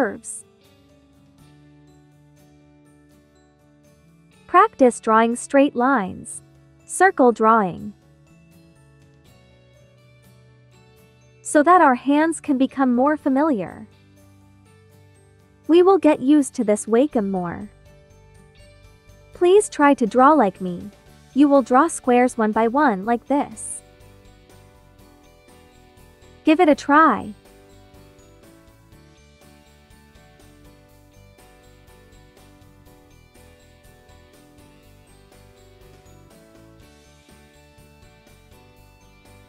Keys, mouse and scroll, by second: 0.1 click, 0.8 ctrl+click, 1.0 ctrl+z, 2.4 click, 9.9 space, 10.1-19.4 drag, 19.4 space, 19.6 click, 19.9 space, 20.8-28.0 drag, 28.0-36.1 drag, 38.4 ctrl+z, 39.2 click.